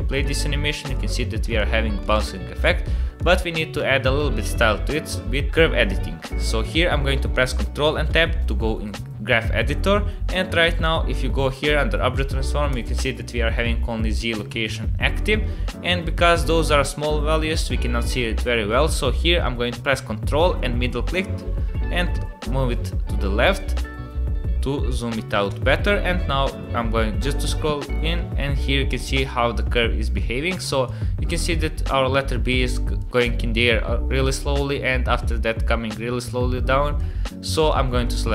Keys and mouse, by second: 0.1 click, 0.8 click, 1.5 click, 2.0 click, 3.2 click, 3.8 space, 4.5 space, 8.1 ctrl+Tab, 10.8 click, 12.7 click, 13.6 middle click, 20.8-25.4 ctrl+middle drag, 27.3 middle click, 28.5 middle click, 29.7 click, 30.6 click, 31.3-32.3 drag, 32.9-37.0 drag, 37.7-38.3 drag.